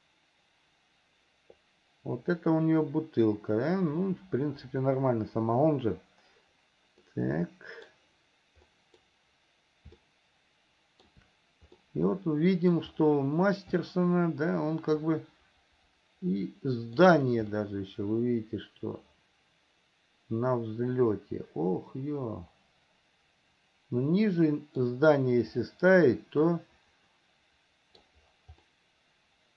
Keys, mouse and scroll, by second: 7.3 scroll up 1, 7.4 middle click, 9.0 middle click, 10.2-11.4 shift+middle drag, 12.0-13.0 middle drag, 13.0 scroll down 1, 14.0 shift+scroll up 1, 14.1-17.4 shift+middle drag, 17.9-25.2 middle drag, 26.8-28.4 middle drag, 29.0-29.5 middle drag.